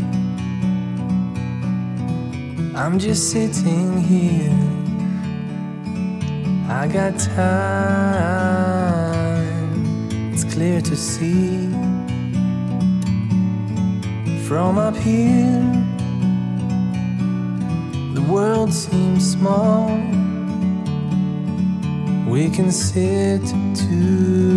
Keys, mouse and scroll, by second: 6.2 click, 7.7 click, 17.1 click, 18.7 click, 19.8 click, 23.2 click, 23.9 shift+click.